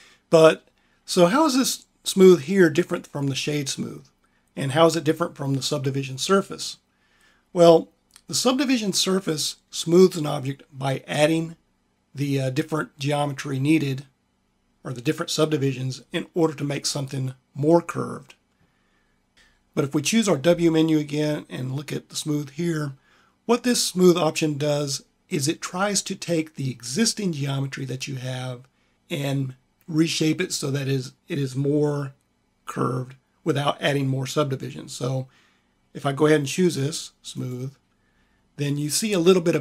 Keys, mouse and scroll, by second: 19.3 q, 20.4 w.